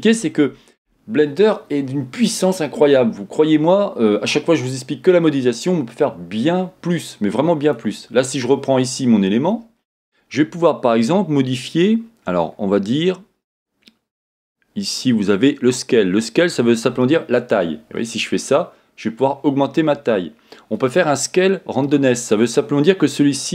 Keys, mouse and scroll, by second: 0.1-7.6 middle drag, 0.1-3.5 scroll down 2, 3.5-3.9 scroll up 2, 3.9-7.6 scroll down 2, 7.6 click, 12.2 scroll down 1, 17.6-23.5 drag.